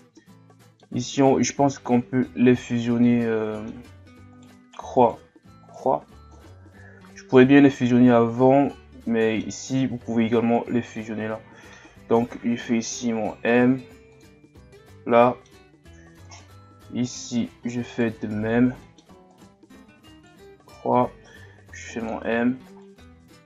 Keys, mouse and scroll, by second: 3.0-4.3 middle drag, 4.3 right click, 5.0 shift+right click, 5.7 shift+right click, 6.3-9.4 middle drag, 11.0-13.5 middle drag, 13.5 m, 15.1 middle click, 15.7-16.3 scroll up 2, 16.3 right click, 17.1 shift+right click, 18.0 shift+right click, 18.8 middle click, 19.3 right click, 20.1 shift+right click, 20.6 shift+right click, 21.5 m, 22.8-23.4 middle drag.